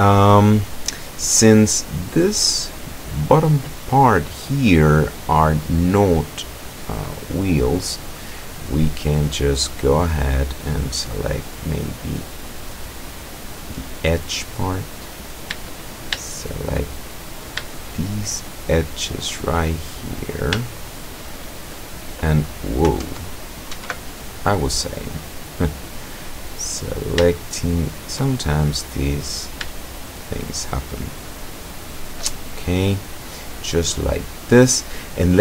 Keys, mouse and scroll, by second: 1.7 middle click, 2.3 middle click, 3.0 middle click, 4.8-5.8 middle drag, 7.1-10.3 middle drag, 12.7 click, 14.6 right click, 16.4 shift+right click, 17.0-17.6 shift+scroll up 1, 18.4 shift+right click, 19.4 shift+right click, 19.9 shift+middle click, 20.9 shift+middle click, 23.1 alt+Tab, 23.8 alt+Tab, 25.3-26.3 middle drag, 27.3 shift+middle click, 28.4-29.7 shift+middle drag, 30.0 shift+right click, 30.7 shift+right click, 31.4 shift+right click, 31.9 shift+right click, 32.4-34.8 shift+middle drag.